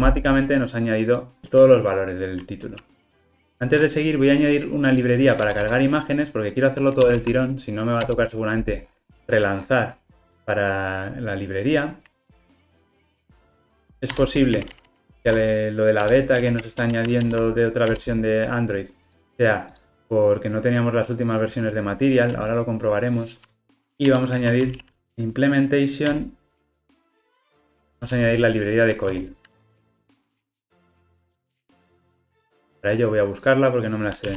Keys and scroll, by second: 13.0 alt+Return, 26.2 Return.